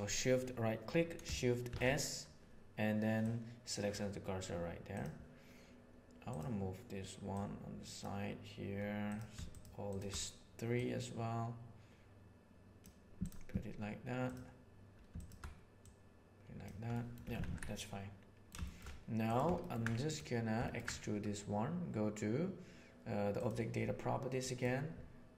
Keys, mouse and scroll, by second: 1.6 shift+s, 7.2 right click, 9.0 right click, 10.7 right click, 11.1-12.7 drag, 13.1 click, 15.7 right click, 16.8 middle click, 17.2 Tab, 17.4 alt+a, 17.6-18.3 middle drag, 18.6 shift+middle click, 19.5 ctrl+middle click, 20.6 ctrl+middle click, 24.3 drag.